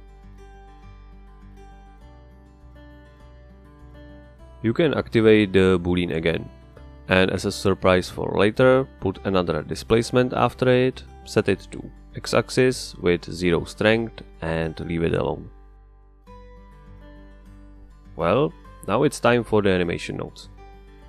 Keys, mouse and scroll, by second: 0.1 click, 0.8-2.3 drag, 3.1-4.6 middle drag, 4.9 click, 6.2 click, 6.7 click, 7.7 space, 11.0 click, 14.0 click, 16.6 click, 18.4 click.